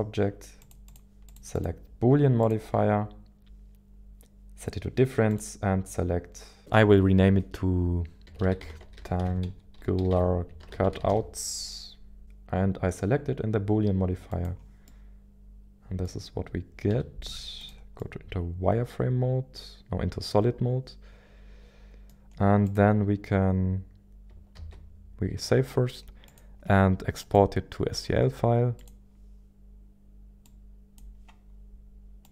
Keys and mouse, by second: 0.7 click, 3.0-12.2 drag, 14.3 click, 14.8-16.1 middle drag, 16.9 z, 18.0-22.1 middle drag, 18.0 z, 24.6 ctrl+s, 26.3-29.0 drag.